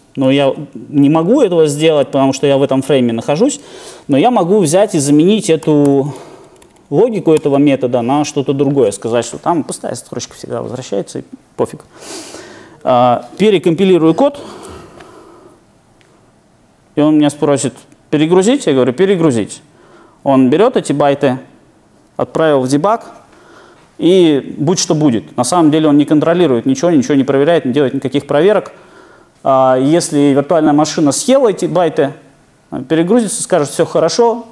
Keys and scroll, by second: 1.7 super+b, 5.6 super+/, 14.3 shift+super+F9.